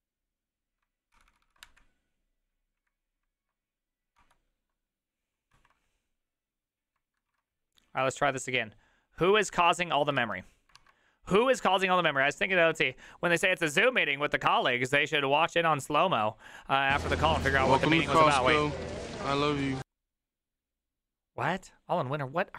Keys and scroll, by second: 1.4 ctrl+c, 1.5 ctrl+c, 1.7 Up, 2.8 Up, 4.2 Return, 5.6 alt+[, 7.4 alt+q, 10.9 alt+{.